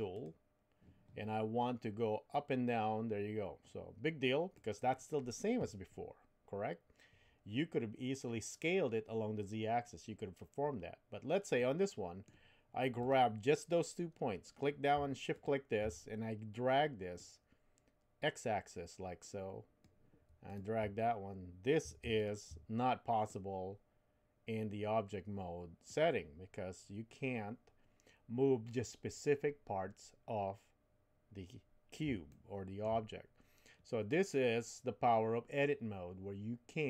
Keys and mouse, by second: 0.1 click, 2.3-4.8 drag, 11.6 middle click, 13.0 click, 15.3 shift+click, 17.2-19.8 drag, 22.2 shift+click, 23.3-25.9 drag, 32.3 shift+middle click.